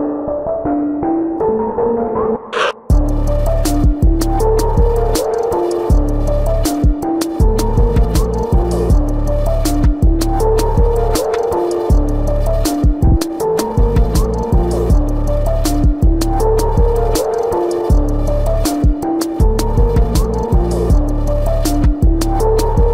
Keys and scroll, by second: 0.3 space, 8.1 space, 12.0 ctrl+alt+z, 16.4 ctrl+=, 18.6 space.